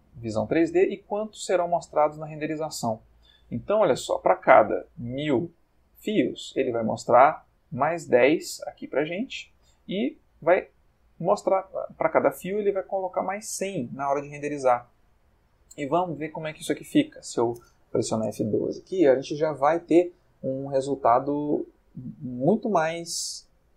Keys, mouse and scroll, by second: 2.5 middle click, 4.1 middle click, 14.3-14.8 middle drag, 15.7 click, 17.1 F12.